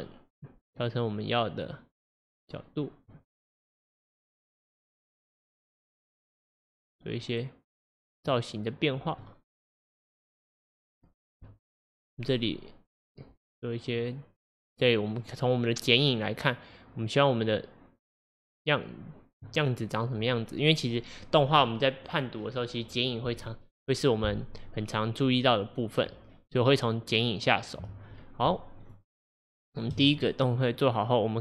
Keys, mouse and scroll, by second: 0.8 click, 1.7 click, 3.6 click, 4.6 click, 9.3-11.4 middle drag, 11.4 KP_3, 12.3 scroll up 2, 17.6 click, 28.9 shift+click, 29.8 shift+click, 30.8-31.4 drag.